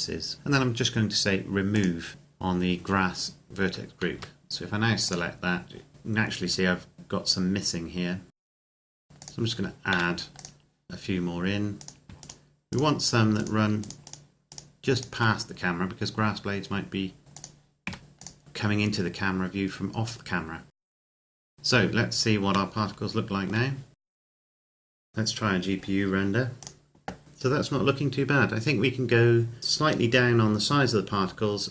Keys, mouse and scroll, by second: 1.7 click, 4.0 a, 5.1 click, 6.6-7.1 scroll up 1, 8.4 click, 8.4 middle click, 8.5 scroll down 1, 8.8 a, 8.8 click, 8.9 middle click, 9.0 a, 10.3 click, 11.5 right click, 11.9 shift+right click, 17.2 click, 17.7 a, 18.0 click, 20.8 right click, 20.8 shift+right click, 21.1 click, 21.3 right click, 21.5 click, 21.5 z, 21.7-22.2 scroll up 1, 22.5 shift+middle click, 23.9 click, 24.0 scroll up 1, 24.1 shift+middle click, 24.5 click, 24.9 ctrl+s, 25.9 click, 26.6 click.